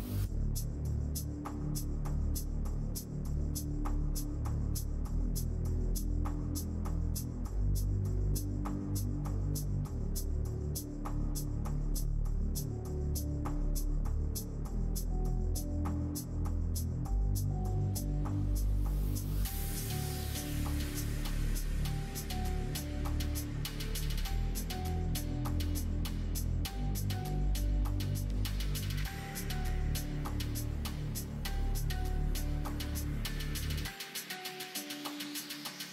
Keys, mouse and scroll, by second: 0.1 f, 0.6 click, 1.0 shift+click, 1.8 middle click, 3.0 click, 4.0 shift+click, 4.6 shift+click, 5.6 shift+click, 7.1 g, 10.2 click, 10.5 g, 13.4 s, 14.3 click, 14.8 shift+click, 15.1 shift+click, 15.7 shift+middle click, 16.4 middle click, 16.9 middle click, 17.5 e, 19.5 middle click, 19.9 e, 21.9 middle click, 22.7 middle click, 24.0 e, 26.9 s, 28.9 e, 30.5 middle click, 32.2 click, 33.0 click, 34.8 shift+click, 35.2 shift+click.